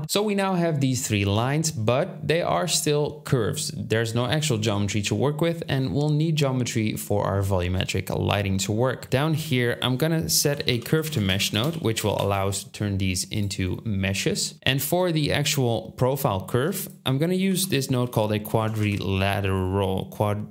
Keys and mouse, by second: 9.1 shift+a, 9.3 shift+a, 11.5-13.5 drag, 11.5-13.5 middle drag, 11.5-13.5 right drag, 14.7-17.9 ctrl+drag, 16.5 shift+a.